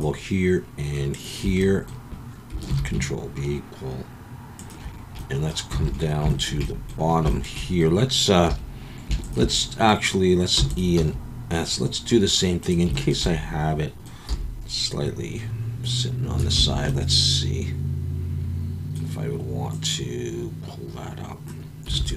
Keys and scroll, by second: 2.7 ctrl+b, 5.8 alt+a, 8.5 2, 10.6 e, 10.9 s, 14.3 e, 16.6 Escape, 22.0 alt+a.